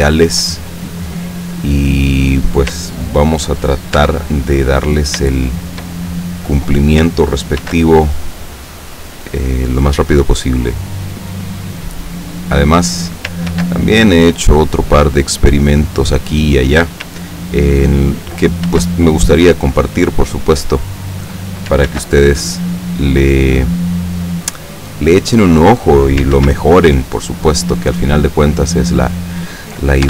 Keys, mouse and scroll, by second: 0.4 shift+middle click, 0.8 shift+right click, 2.1 right click, 4.0 Tab, 5.4-6.0 shift+middle drag, 7.7 ctrl+r, 8.4 click, 12.4 click, 13.6 ctrl+r, 14.1 ctrl+click, 16.0 click, 18.7 ctrl+r, 19.2 ctrl+click, 21.0 click, 21.9 ctrl+r, 22.5 ctrl+click, 25.5 click, 26.4 ctrl+r, 27.0 ctrl+click, 29.0 click.